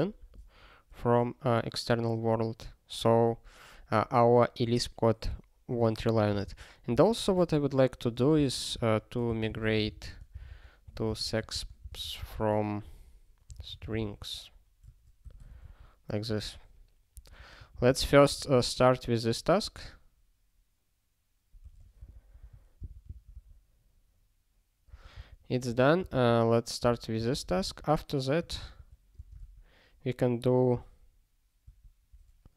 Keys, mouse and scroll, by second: 6.3 ctrl+n, 6.4 ctrl+n, 6.9 ctrl+e, 7.3 alt+Return, 8.1 ctrl+p, 8.3 ctrl+k, 8.7 ctrl+e, 9.0-15.3 typing, 15.7 ctrl+s, 17.2 alt+Up, 18.1 ctrl+s, 18.3 ctrl+space, 18.4 ctrl+a, 19.6 ctrl+g, 21.6 ctrl+p, 22.1 alt+Down, 23.0 ctrl+s, 23.1 ctrl+p, 23.3 ctrl+p, 24.9 ctrl+space, 25.1 ctrl+n, 25.6 ctrl+g, 26.0 ctrl+space, 26.1 ctrl+n, 26.8 ctrl+g, 27.2 Return, 27.3 ctrl+p, 28.7 -, 29.2 space, 31.6 space.